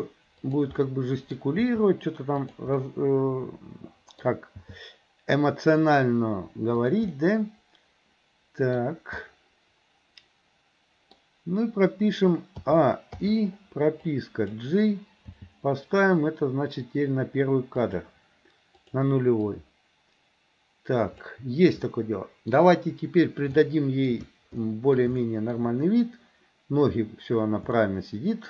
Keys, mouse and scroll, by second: 0.8 middle click, 1.7 r, 2.8-4.3 middle drag, 4.7 g, 7.1 scroll up 1, 7.3-8.9 middle drag, 8.9-9.3 scroll down 1, 9.3 scroll up 1, 9.4-11.2 middle drag, 12.7 a, 13.2 i, 14.1 click, 15.3 g, 18.8 click, 19.5 click, 21.9 middle click, 23.6 shift+middle click, 24.7 middle click, 25.2 shift+middle click, 27.9 shift+middle click.